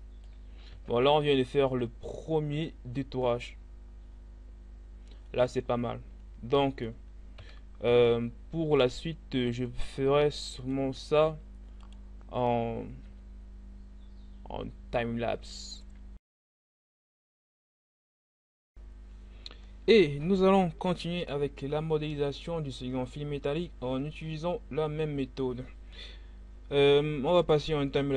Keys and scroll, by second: 0.3 Tab, 1.3 a, 7.0 1, 10.9 Tab, 13.1 g, 16.3 z, 16.7 Tab.